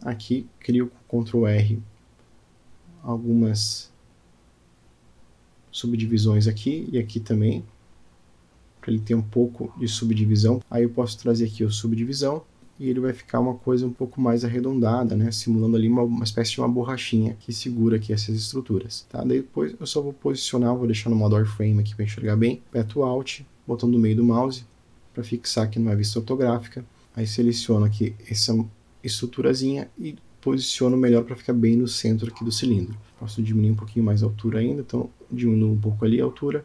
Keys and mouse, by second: 3.3 ctrl+z, 4.3 ctrl+r, 6.4 ctrl+r, 10.6 Tab, 11.1 Tab, 12.6 click, 13.5 Tab, 13.9 drag, 14.2 click, 15.6-18.0 drag, 18.7 click, 19.5 click, 20.7-21.6 right drag, 22.0 click, 22.5-25.8 middle drag, 26.4 click, 27.2-27.8 alt+middle drag, 28.6 shift+middle drag, 29.0 click, 30.3 g, 35.8 s.